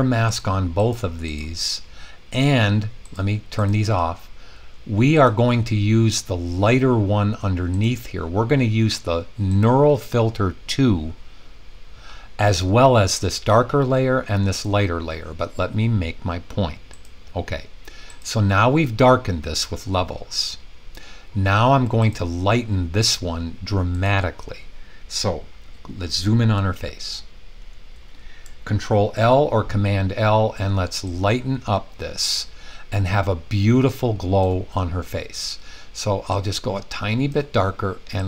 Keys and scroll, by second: 29.1 super+i.